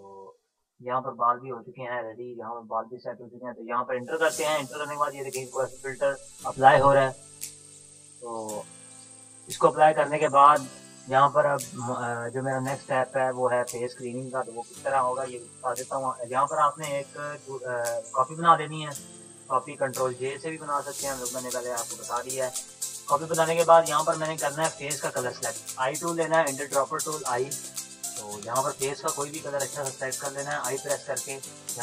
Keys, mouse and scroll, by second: 3.3 Return, 11.4 ctrl+-, 12.8 click, 13.3 ctrl+-, 13.7 click, 14.9 ctrl+shift+e, 16.5 click, 16.5-20.3 drag, 20.3 ctrl+j, 23.7 click, 24.0 ctrl+-, 26.3 ctrl+-, 26.5 click.